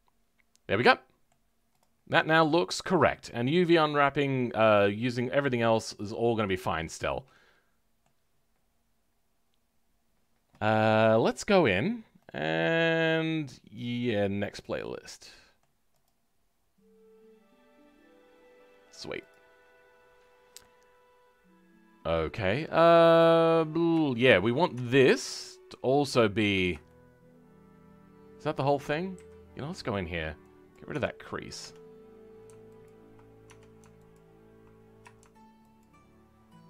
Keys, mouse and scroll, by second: 1.7 click, 1.9 scroll down 2, 2.1 middle click, 3.1-5.9 scroll up 2, 5.9 click, 6.7-7.0 scroll down 2, 7.0-20.1 middle drag, 20.1-20.6 scroll down 3, 20.6-23.1 middle drag, 23.1-24.0 scroll up 4, 24.0 shift+middle click, 24.7 Tab, 26.0 alt+click, 26.8-29.1 shift+middle drag, 29.1 a, 31.5 Tab, 32.8 alt+click, 33.4 Tab, 34.1 alt+click.